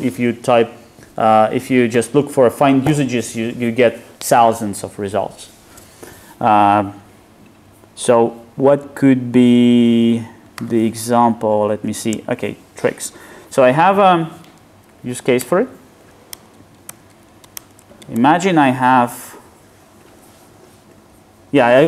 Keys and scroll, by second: 10.7 super+e, 15.4 super+..